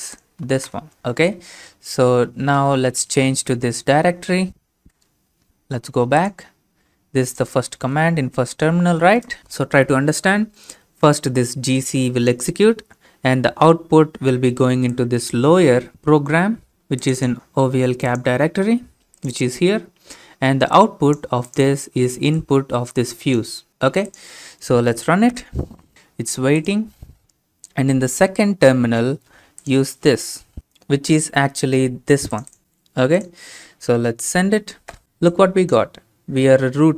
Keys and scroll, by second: 0.4 ctrl+c, 1.0 Return, 1.0 alt+Tab, 1.0 ctrl+v, 2.3-3.1 typing, 4.5 ctrl+v, 4.9 Return, 8.0 alt+Tab, 9.0 ctrl+v, 30.3 alt+Tab, 30.6 ctrl+v.